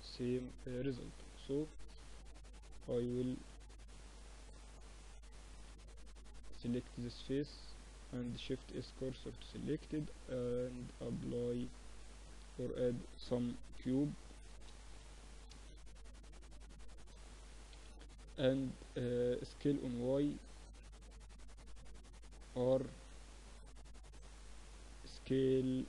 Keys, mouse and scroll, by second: 0.9-3.4 middle drag, 2.1 ctrl+r, 3.4 ctrl+r, 4.5 Tab, 4.7-6.7 middle drag, 5.6 Tab, 6.7 click, 8.1 shift+s, 9.2 Tab, 9.7 shift+a, 13.2 s, 14.5 s, 15.7 s, 17.5 KP_3, 18.9-20.9 middle drag, 19.5 s, 22.3 r, 24.9 s.